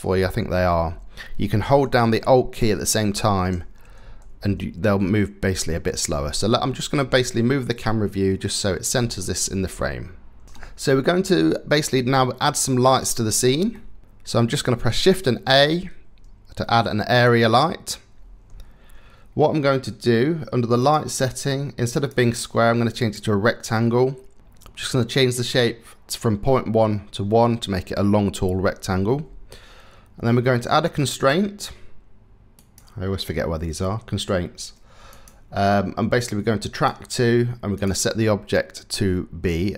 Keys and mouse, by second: 11.4 middle click, 11.6 click, 11.7-12.4 middle drag, 13.4-14.0 drag, 14.0 shift+a, 14.6 shift+a, 20.4 click, 21.5-22.8 drag, 24.1 click, 30.8-32.5 drag, 34.8-36.5 drag.